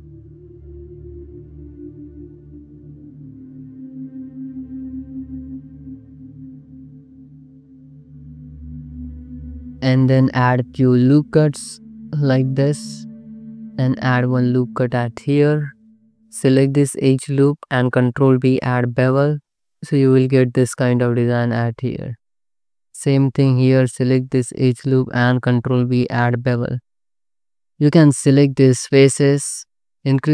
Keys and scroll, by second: 0.1 ctrl+shift+x, 0.5 a, 1.6 1, 2.7 space, 3.5 space, 5.0-7.4 typing, 8.8 c, 9.1 Tab, 9.5 alt+shift+z, 9.7 alt+shift+z, 10.0 Tab, 10.8 ctrl+r, 13.3 ctrl+r, 16.4 2, 17.0 ctrl+b, 19.0 BackSpace, 19.5 2, 20.1 ctrl+x, 20.3 Tab, 20.7 alt+shift+z, 22.0 alt+shift+z, 23.0 2, 25.5 ctrl+b, 27.3 Tab, 27.6 3.